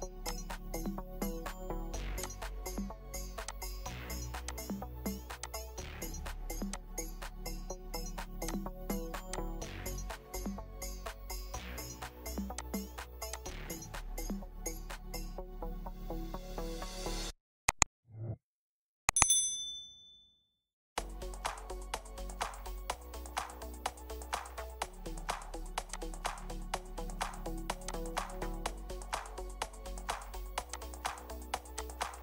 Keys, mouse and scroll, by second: 7.3 scroll down 1, 7.6 scroll up 1, 7.6-8.5 scroll down 1, 10.5 1, 10.8 Return, 10.8 1, 16.2 Return, 16.6 6, 18.2-19.6 scroll down 1, 24.4-26.2 scroll down 1, 26.4-26.8 scroll down 1, 26.8 scroll up 1, 28.2-30.0 scroll down 1.